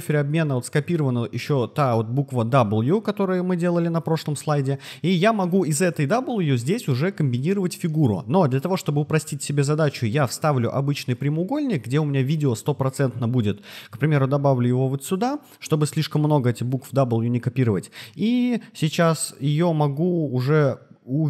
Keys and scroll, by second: 18.6 super+c.